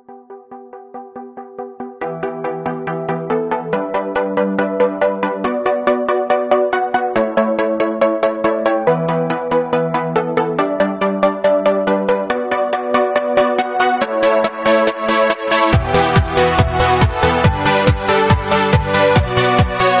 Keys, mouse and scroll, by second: 0.0-1.3 drag, 1.3-1.7 scroll down 4, 1.7 middle drag, 2.0 scroll up 1, 2.1 click, 2.4 click, 2.7 shift+middle click, 2.8-3.2 scroll down 1, 3.2-4.5 middle drag, 3.9 scroll up 1, 4.5 click, 4.8-6.9 shift+middle drag, 6.9-8.0 drag, 9.5 KP_1, 10.0 shift+a, 11.2 Delete, 11.4 shift+a, 12.8 drag, 13.1-13.5 middle drag, 13.5 scroll down 2, 13.7 middle click, 14.2 KP_3, 15.3-16.4 drag, 16.4 s, 19.3-19.8 middle drag.